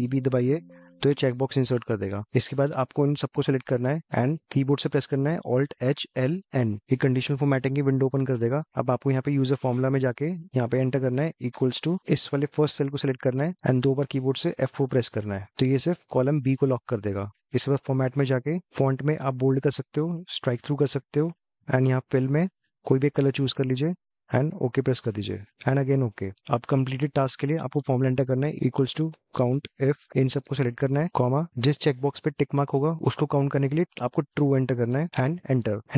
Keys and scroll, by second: 5.6 alt+h.